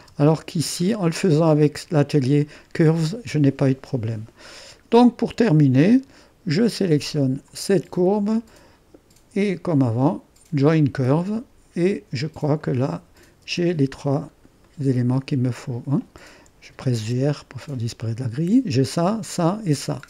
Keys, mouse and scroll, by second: 0.7 click, 1.5 click, 4.6-5.1 scroll down 2, 4.6 middle click, 5.1 click, 5.9-7.2 middle drag, 7.2 click, 10.7-13.0 drag, 13.5 click, 13.5 space, 14.3-14.7 scroll down 1, 14.7-15.8 right drag, 15.8-16.8 scroll up 1, 16.8 g, 17.0 r, 17.7-18.3 scroll up 1.